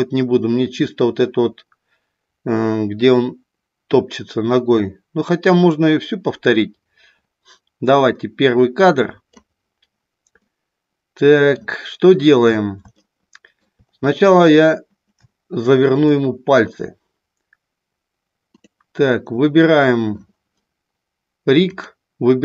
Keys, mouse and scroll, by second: 10.4-11.6 middle drag, 13.1 shift+middle click, 15.3 shift+middle click, 16.2 middle click, 18.6 click, 19.4 middle click, 21.7-22.4 drag.